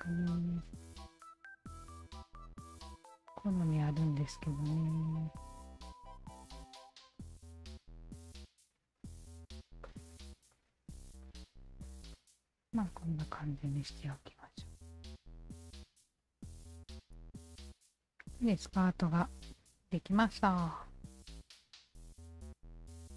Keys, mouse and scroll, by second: 0.0 Tab, 0.0 click, 0.8-2.0 alt+drag, 3.1 click, 4.7-5.9 shift+drag, 6.3 ctrl+z, 7.2 click, 8.1 click, 8.7 shift+click, 9.9 click, 10.5 click, 11.3 alt+right click, 11.8 alt+click, 12.1 alt+click, 13.1 ctrl+s, 13.4 Tab, 13.7 alt+click, 14.0-14.7 alt+right drag, 14.7 alt+middle drag, 15.0 alt+click, 16.3 alt+click, 17.0 alt+click, 17.7-20.6 alt+drag, 20.8-23.1 alt+drag.